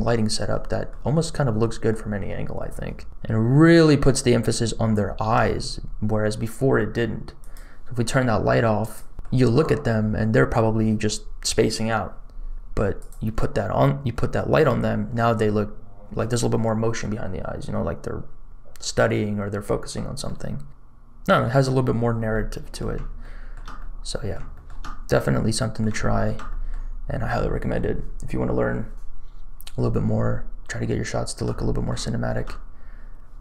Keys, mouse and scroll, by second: 1.4 middle click, 2.6-3.8 shift+middle drag, 4.1-4.9 scroll up 4, 4.9 shift+middle click, 5.9-7.3 scroll down 3, 7.3 click, 8.8 click, 9.1 shift+middle click, 9.1-9.8 scroll up 1, 12.9 click, 14.6-15.7 scroll up 2, 15.7 scroll down 1, 20.2-21.2 middle drag, 20.7-21.2 scroll down 2, 22.0-22.4 scroll up 2, 22.3 middle click, 23.1 shift+middle click, 23.7 middle click, 24.5 shift+middle click, 24.7-25.8 middle drag, 25.9 shift+middle click, 26.4 middle click, 30.8 shift+middle click, 31.5 middle click, 32.0 shift+middle click, 32.7-33.4 scroll down 1.